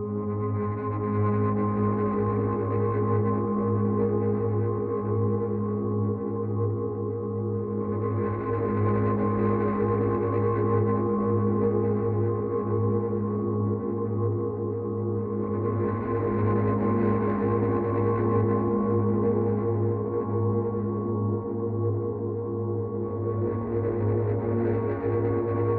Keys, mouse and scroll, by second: 0.7 click, 3.4 Right, 6.8 click, 11.5 click, 14.0 click, 17.9 Left, 19.2 click, 21.1 click.